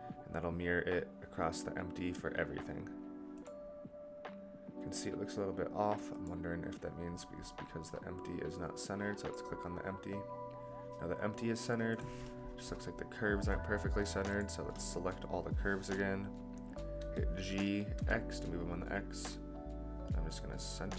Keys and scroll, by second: 16.9 g.